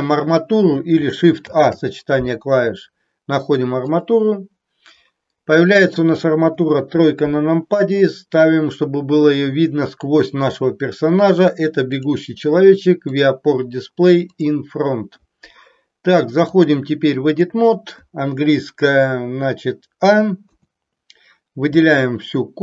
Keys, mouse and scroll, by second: 1.5 shift+a, 6.6 KP_3, 13.1 click, 14.3 click, 16.5-17.6 drag, 20.5 a.